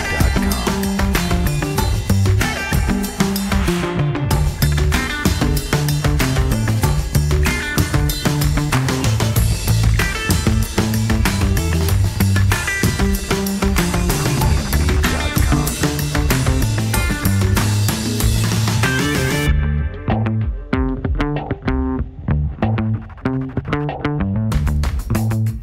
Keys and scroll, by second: 0.5 g, 3.1 F3, 17.2 w, 22.3 alt+x.